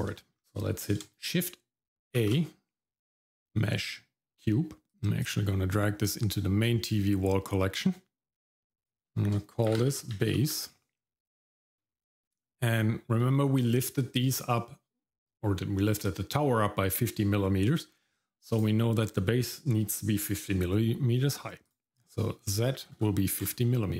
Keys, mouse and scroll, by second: 0.1 shift+middle click, 0.4-0.7 scroll down 1, 2.2 shift+a, 5.2 click, 8.6 click, 8.8-10.4 drag, 18.5 click, 21.6-23.4 drag.